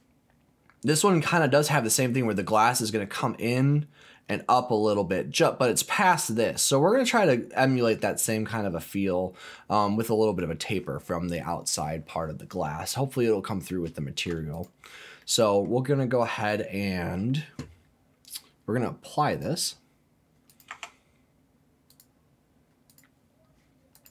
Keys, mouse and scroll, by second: 8.4-9.0 scroll down 1, 9.0 middle click, 9.6-10.0 scroll down 2, 10.0 middle click, 12.8 scroll up 2, 13.2 middle click, 13.9 shift+middle click, 14.5 click, 15.2 middle click, 15.9-16.2 scroll down 2, 16.2 middle click, 16.8-18.0 scroll up 1, 18.0 scroll up 1, 19.3-20.3 drag, 20.5 click, 20.7 Tab, 21.9 click, 22.9 click, 23.9 click.